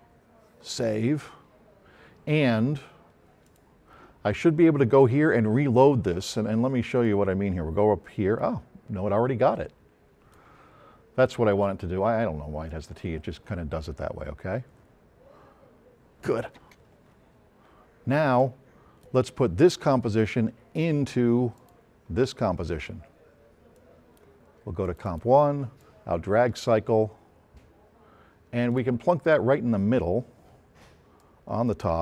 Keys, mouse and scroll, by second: 0.7 click, 3.5 click, 7.1-10.5 drag, 12.7 click, 16.6 space, 18.4-19.2 drag, 21.6 click, 24.9 click, 25.8-28.9 drag, 31.2-32.0 drag.